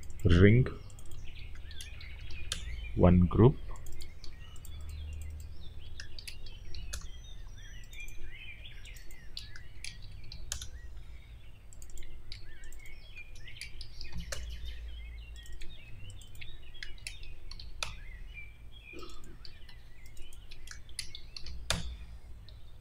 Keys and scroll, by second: 0.4 ctrl+c, 1.3-2.6 typing, 4.1 ctrl+c, 5.7 ctrl+v, 5.8-7.1 typing, 8.3 ctrl+c, 9.4-10.6 typing, 12.2 ctrl+c, 13.1-14.4 typing, 15.7 ctrl+c, 16.6 ctrl+v, 16.6-17.9 typing, 19.6 ctrl+c, 20.5-21.7 typing.